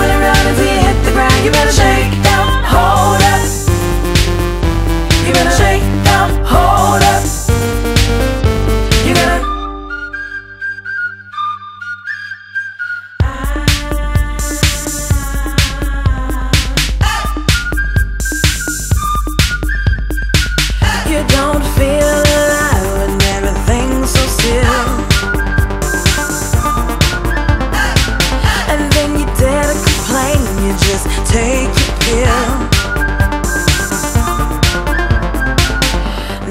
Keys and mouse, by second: 7.1 click, 10.0 click, 10.7 click, 12.1 click, 13.6 click, 17.5 click, 20.4 click, 21.4 click, 22.5 click, 23.7 click, 24.9 click, 26.0 click, 26.0 right click, 27.0 click, 27.8 click, 29.3 click, 30.4 click, 32.5 click, 33.5 ctrl+d, 34.2 click, 36.4 click.